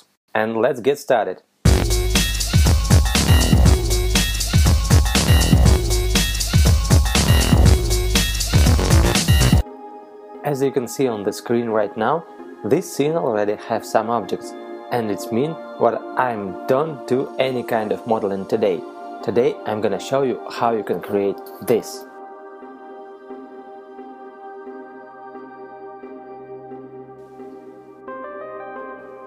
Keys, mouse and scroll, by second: 14.5 right click, 17.0 middle click.